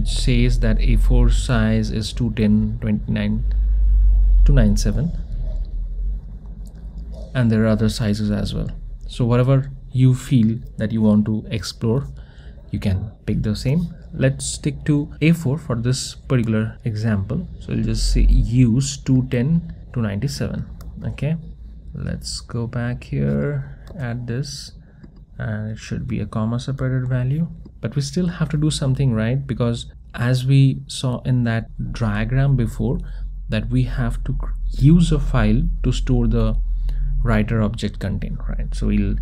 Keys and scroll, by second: 23.9 super+v, 27.7 Tab.